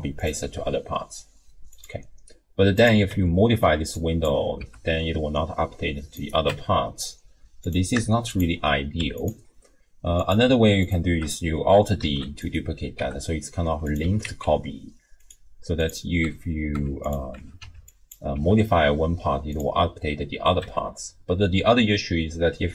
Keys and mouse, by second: 0.4 g, 3.3 Tab, 3.7 1, 4.0 click, 4.6 g, 6.5 Tab, 8.3 shift+click, 9.0 x, 10.2 click, 10.8 shift+click, 12.0 alt+d, 13.0 g, 14.0 r, 15.8 click, 16.3 Tab, 16.8 Tab, 17.3 Tab, 17.6 1, 18.0 click, 18.3 g, 20.6 Tab, 22.5 ctrl+z.